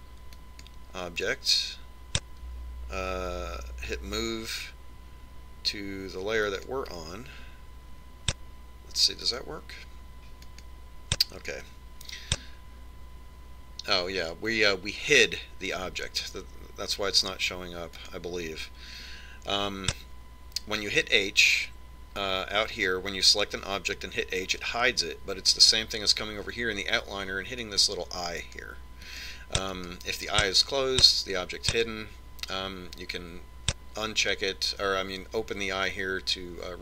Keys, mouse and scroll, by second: 2.1 click, 5.0 m, 11.0 click, 19.8 click, 29.5 click, 33.6 click.